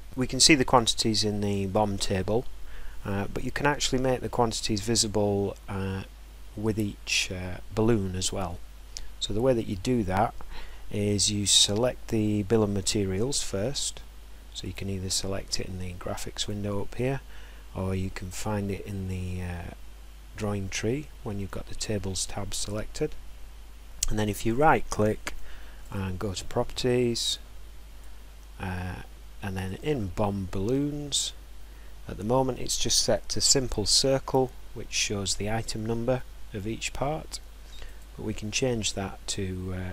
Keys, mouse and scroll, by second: 3.7 scroll, 4.4 scroll, 9.6 click, 14.6 click, 16.4 click, 18.2 click, 24.2 right click, 25.9 click, 27.9 click, 29.7 click, 31.1 click, 37.9 click.